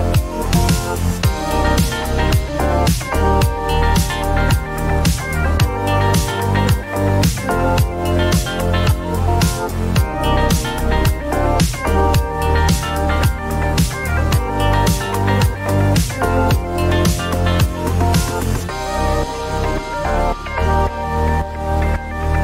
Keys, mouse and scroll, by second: 0.5 click, 1.4 click, 3.7 click, 4.6 click, 5.7-7.9 typing, 9.8 click, 10.8 click, 12.7-14.3 drag, 16.5-18.7 drag, 19.0-20.8 drag.